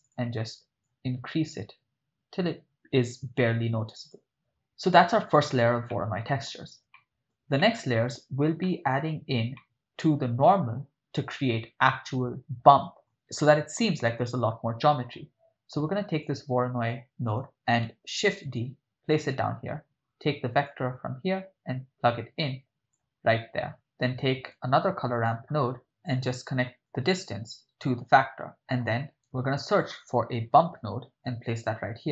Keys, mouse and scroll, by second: 0.0 click, 5.9 ctrl+middle click, 6.9 shift+middle click, 7.6-8.1 ctrl+middle drag, 8.6-9.1 middle drag, 9.7 ctrl+middle click, 12.0 middle click, 13.0 middle click, 16.2 click, 18.3 shift+d, 19.2 click, 20.7-23.0 drag, 24.7 shift+a, 26.9-27.9 drag, 28.4 click, 28.5 middle click, 29.3 shift+a.